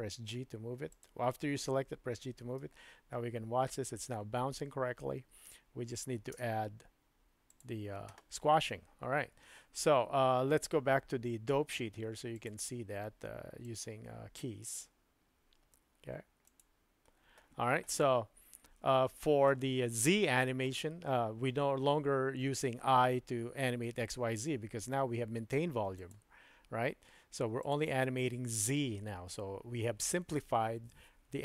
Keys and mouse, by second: 2.5 space, 6.4 space, 7.5 click, 12.3-13.0 drag, 13.6-16.6 drag, 26.1-27.7 drag.